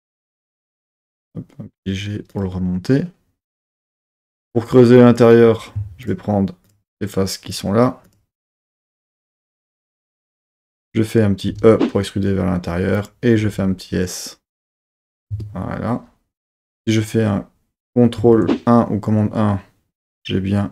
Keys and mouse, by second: 2.3 click, 4.2 3, 4.9 click, 6.0-8.0 shift+drag, 11.5 e, 13.0 click, 13.4 s, 15.1 click, 15.3 Tab, 18.2 super+1.